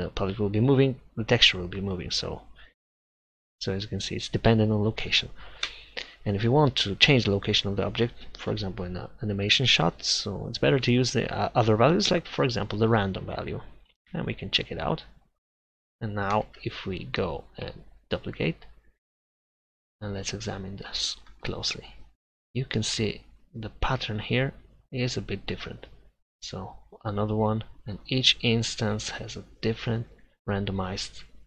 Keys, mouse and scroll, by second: 5.7 Delete, 11.6-13.1 middle drag, 13.1-14.6 drag, 16.6 shift+d, 25.6 shift+d, 28.9 shift+d.